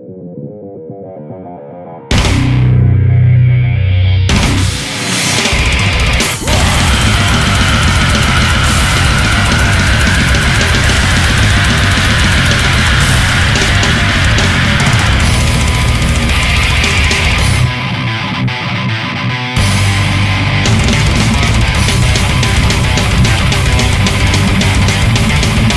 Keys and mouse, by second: 0.4 right click, 3.0 ctrl+z, 11.6 ctrl+z, 18.7 ctrl+z.